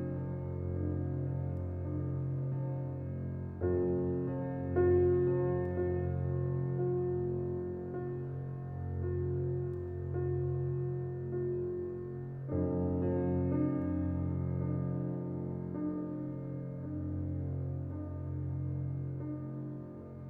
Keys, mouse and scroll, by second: 1.6-3.2 shift+scroll down 1, 4.8-5.5 scroll up 1, 8.8-10.4 drag, 10.4 ctrl+z, 11.0-11.8 scroll down 1, 13.2-14.9 scroll up 2, 13.3 click, 16.0 scroll up 1, 17.1 click, 18.1 scroll down 1.